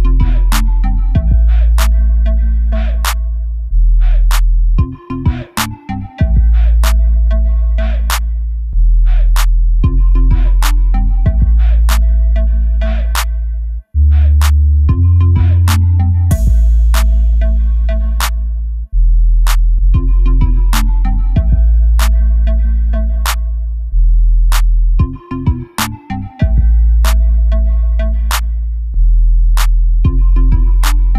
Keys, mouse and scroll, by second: 0.3 click, 0.6 middle click, 1.0 3, 1.2 click, 1.8-3.6 middle drag, 2.6-2.9 scroll up 2, 3.2 2, 3.6 click, 4.0 ctrl+click, 6.1-7.3 middle drag, 7.3 ctrl+shift+click, 8.5 ctrl+click, 11.2 ctrl+shift+click, 11.9 scroll up 1, 12.8 KP_Decimal, 13.7 ctrl+shift+click, 14.3 scroll down 1, 14.5 middle click, 15.4 ctrl+shift+click, 16.7-17.0 scroll down 1, 17.0 ctrl+shift+click, 17.2 scroll down 1, 17.7 ctrl+shift+click, 18.1 KP_7, 18.7 g, 21.0 click, 22.0-25.1 middle drag, 22.9 ctrl+r, 25.1 click, 25.5 3, 25.7 click, 26.3 i, 27.4 click, 27.7 e, 29.4 click, 29.8-31.1 middle drag, 30.9 scroll up 1.